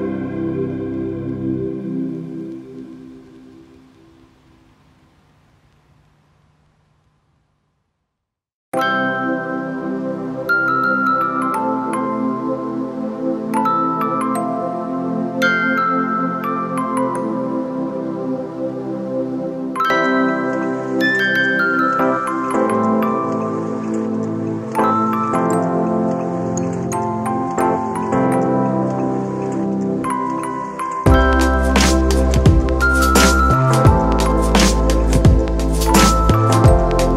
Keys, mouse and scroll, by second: 15.9 ctrl+=, 23.1 [, 34.2 right click.